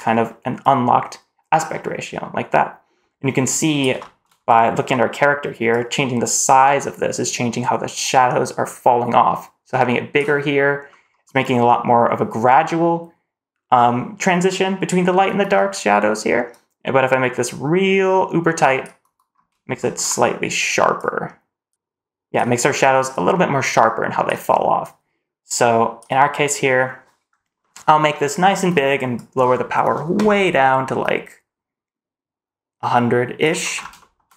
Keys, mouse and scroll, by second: 0.5 click, 3.9 shift+middle click, 4.1-4.5 shift+scroll up 2, 5.6-10.1 drag, 10.8-14.9 scroll down 1, 16.4-18.7 drag, 19.2 scroll up 1, 19.7 shift+middle click, 20.0-20.4 scroll down 1, 20.9 click, 21.7 click, 23.0-24.2 drag, 24.7-25.9 drag, 26.4 middle click, 27.2 scroll down 1, 27.5-27.9 middle drag, 28.0-28.8 scroll down 1, 29.1-33.3 drag, 33.7 scroll up 2, 33.9 shift+middle drag, 34.2 middle drag.